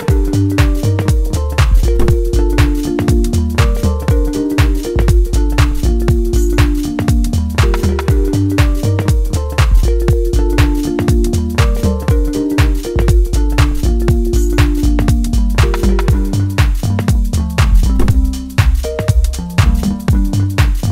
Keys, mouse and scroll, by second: 6.7 ctrl+z, 7.6-10.1 middle drag, 10.1 middle click, 11.0-11.6 scroll up 1, 11.6-14.6 middle drag, 14.6-16.5 scroll up 1, 16.6 click, 18.8 click, 19.8 right click.